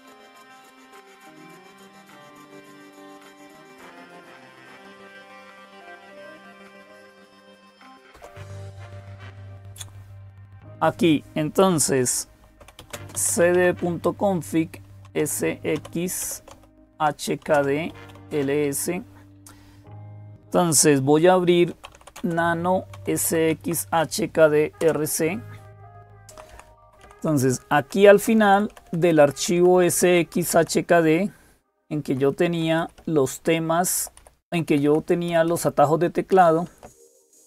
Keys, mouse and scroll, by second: 0.0-37.4 typing, 2.2 click, 7.9 super+Return, 24.6 Tab, 24.6 Return, 26.1 Down, 26.3 Down, 26.5 Down, 26.6 Down, 27.6 Down, 27.6 Page_Down, 33.4 Up, 34.3 Up, 34.5-35.1 Up, 35.3 Down, 36.1 Down, 36.6 Down, 37.3 Up.